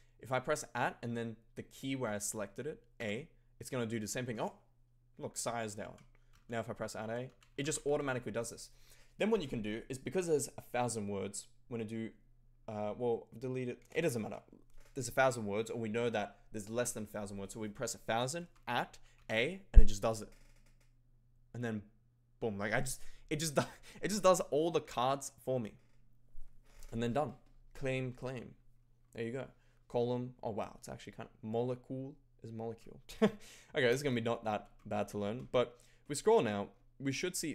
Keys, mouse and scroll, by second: 3.1 a, 5.8-8.4 typing, 13.6-14.7 typing, 18.4 shift+@, 19.2 a.